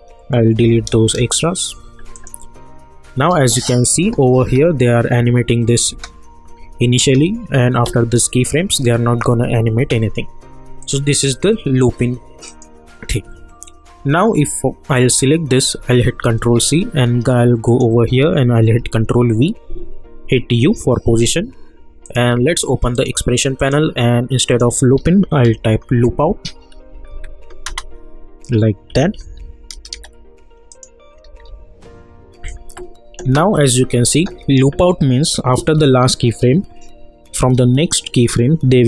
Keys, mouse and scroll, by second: 0.6 Right, 2.1 click, 3.2 space, 9.7 space, 10.8 click, 14.9 click, 16.3 ctrl+c, 17.7 click, 18.8 ctrl+v, 20.6 u, 22.0 click, 26.9 Down, 27.6 Return, 28.9 Right, 30.7 click, 31.3 =, 31.4 =, 32.5 click, 33.3 space, 35.7 k, 37.4 Page_Down.